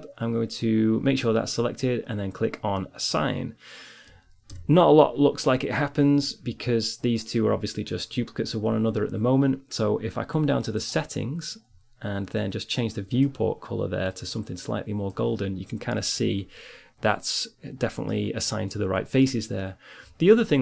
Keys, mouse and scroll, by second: 4.2 Tab, 11.1-14.8 drag, 15.8-20.6 middle drag.